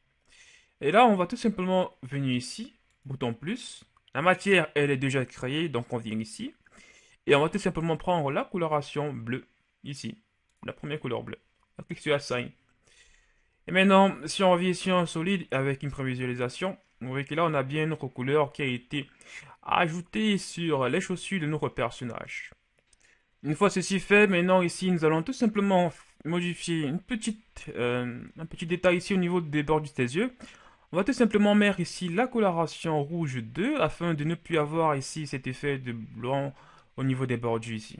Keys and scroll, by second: 13.3 Tab, 14.3 z, 14.9 z, 15.7 a, 34.3 a.